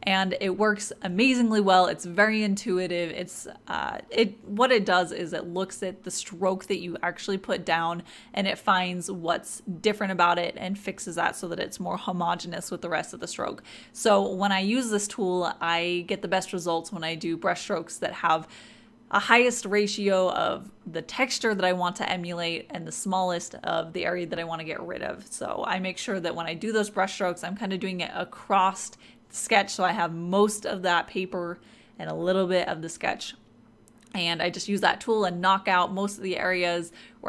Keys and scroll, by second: 34.7-36.7 typing.